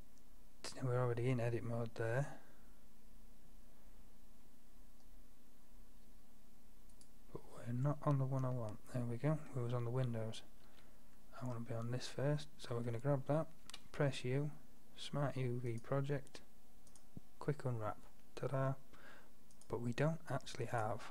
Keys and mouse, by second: 6.1 Tab, 7.0-7.9 drag, 7.9 Tab, 10.7 a, 13.7 u, 17.7-21.1 middle drag.